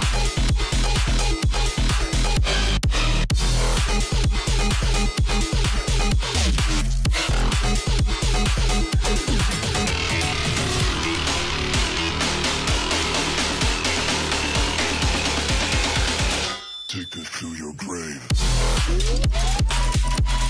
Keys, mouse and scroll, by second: 4.0-12.9 drag, 13.2 alt+scroll down 1, 14.3 alt+scroll up 1, 14.8 click, 16.1-16.8 alt+scroll down 1, 16.8 alt+scroll up 1, 17.2-18.6 drag, 18.6 alt+scroll down 1, 18.8-20.2 drag, 20.2 ctrl+g.